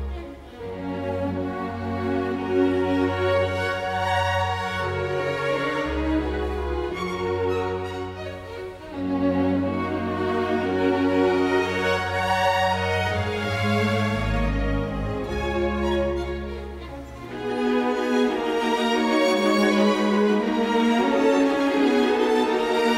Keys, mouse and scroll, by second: 0.8 ctrl+j, 5.8 space, 7.1 Escape, 10.2 Escape, 13.4 ctrl+z, 15.3 Escape, 19.2 ctrl+j, 21.9 shift+space.